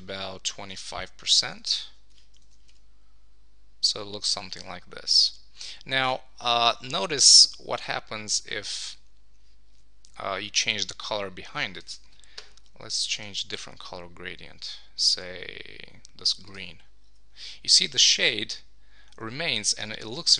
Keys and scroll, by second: 1.4 Return, 1.9 super+s, 2.4 super+1.